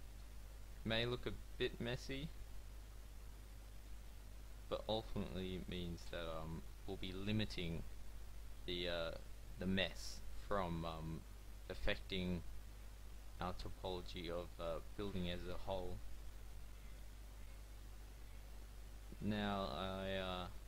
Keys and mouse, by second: 0.1 f, 1.1 a, 4.2 f, 7.1 f, 9.7 f, 12.8 f, 15.4 f, 18.5 f, 19.3 a.